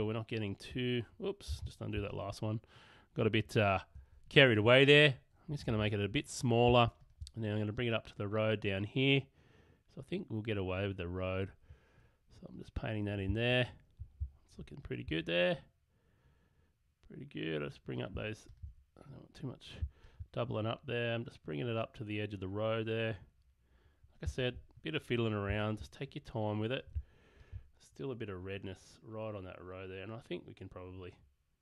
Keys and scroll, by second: 0.0 space, 2.0 super+space, 5.5 [, 6.7 alt+[.